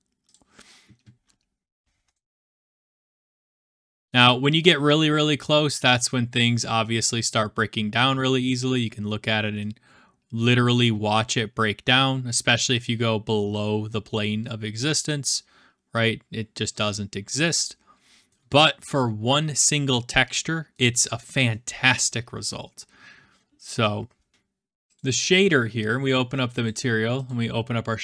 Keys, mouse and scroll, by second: 0.4 click, 1.1 middle click, 1.4 middle click, 1.9-3.0 scroll, 3.6 scroll, 4.7-5.2 scroll, 6.0-7.3 scroll, 8.7 scroll, 9.3 scroll, 10.4 scroll, 18.4-19.0 scroll, 19.0-20.2 scroll, 20.2 scroll, 21.0-21.8 scroll, 22.8 scroll, 24.9 click, 25.4 click, 26.6 click, 27.2 click.